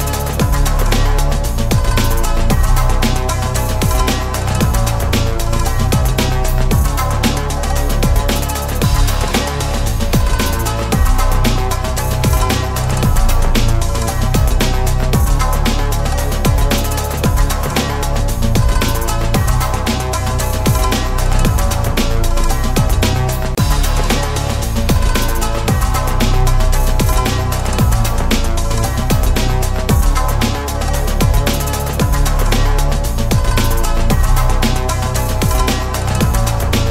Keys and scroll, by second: 20.1 ctrl+BackSpace.